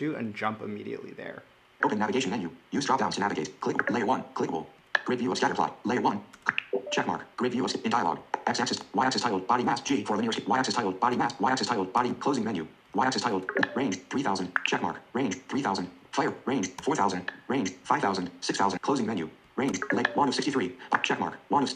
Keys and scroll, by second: 18.7 ctrl+alt+Down.